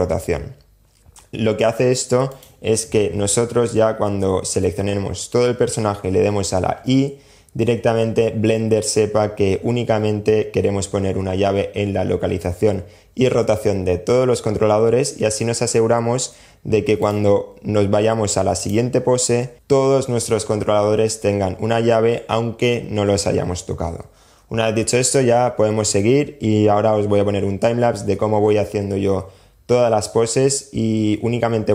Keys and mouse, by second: 0.0 click, 1.5 click, 3.8 a, 6.0 i, 16.2 click, 17.8 click, 18.8 click.